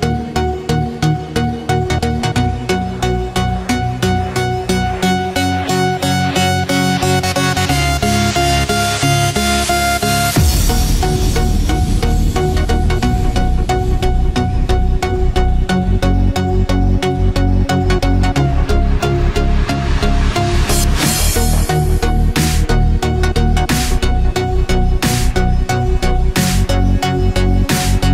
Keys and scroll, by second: 0.5 ctrl+alt+z, 2.0 ctrl+z, 9.7 ctrl+z, 20.5 ctrl+z, 25.8 ctrl+-, 27.0 ctrl+=.